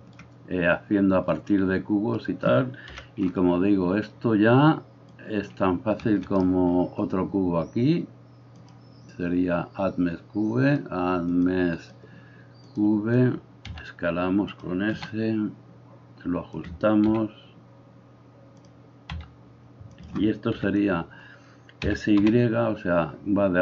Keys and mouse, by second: 2.9 KP_1, 6.4-10.8 middle drag, 6.4-8.7 right drag, 10.8-14.6 drag, 13.7 s, 14.6-20.1 middle drag, 14.9 s, 17.1 g, 19.2 s, 20.1 click, 20.6-21.8 middle drag, 20.6 KP_3, 21.8-23.6 drag, 21.8 s.